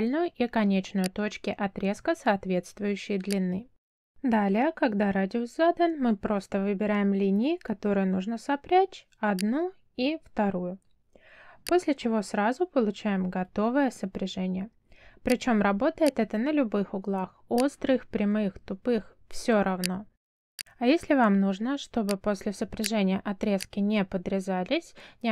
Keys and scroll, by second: 25.1 f.